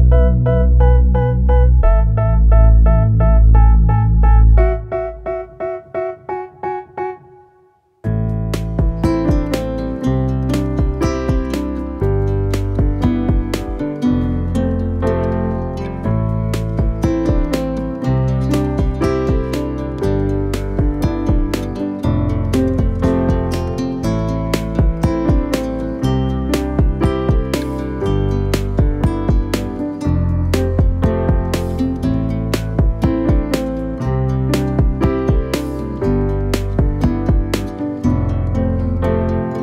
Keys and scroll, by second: 0.1 6, 0.2 Return, 1.3 g, 1.4 y, 2.4 shift+s, 3.9 shift+a, 5.0 1, 6.8 a, 6.9 e, 9.8 ctrl+r, 10.1 e, 12.1 e, 15.0 g, 16.1 g, 16.6 Escape, 17.1 g, 20.8 ctrl+a, 22.4 ctrl+2, 24.2 ctrl+r, 24.8 g, 25.1 Escape, 25.7 g, 26.1 Escape, 26.8 g, 27.1 z, 27.9 g, 28.6 Escape, 29.2 g, 30.1 z, 31.6 r, 32.4 Escape, 33.4 g, 37.1 shift+d, 37.4 y, 37.9 Escape, 38.2 ctrl+z, 38.8 g, 38.9 y.